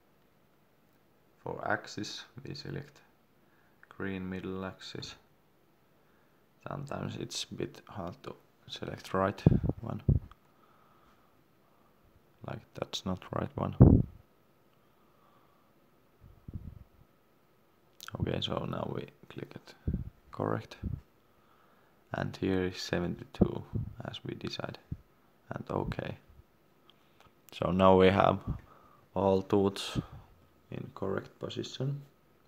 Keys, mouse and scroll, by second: 0.9-1.2 scroll up 1, 2.3 click, 3.4 middle click, 6.4 shift+scroll up 1, 6.4 shift+middle click, 8.1 click, 9.4 scroll down 1, 11.5 click, 12.3 scroll up 1, 12.8 shift+scroll up 1, 13.0 shift+middle click, 17.4-18.0 scroll down 1, 18.4 click, 18.8 scroll up 1, 23.2 7, 25.4 middle click, 27.6 click, 29.0 shift+middle click.